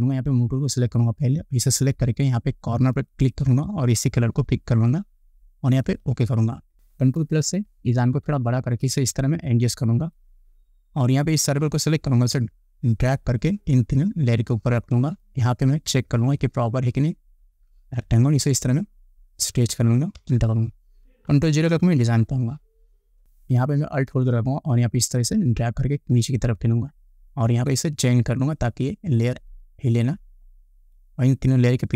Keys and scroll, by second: 7.7 ctrl+=, 8.6 space, 15.3 space, 17.7 ctrl+t, 20.4 Return, 22.0 ctrl+0.